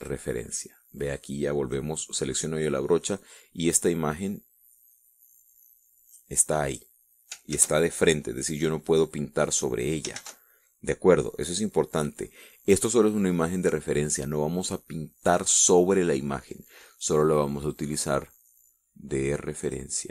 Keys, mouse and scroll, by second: 0.7 click, 1.9 click, 4.4-7.0 drag, 7.0-8.0 scroll up 1, 8.2 ctrl+z, 9.9 click, 10.9 ctrl+z, 18.4-20.1 drag.